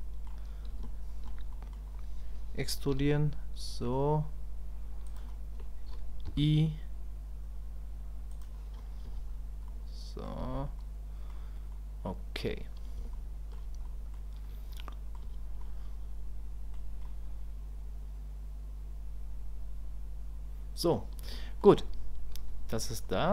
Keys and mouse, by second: 0.8 shift+click, 1.5 click, 9.7 click, 10.8 middle click, 11.7 click, 13.1 shift+middle click, 13.8 middle click, 14.8 middle click, 15.6-16.7 middle drag, 17.1-20.9 middle drag, 21.4 shift+middle click, 22.5 KP_1.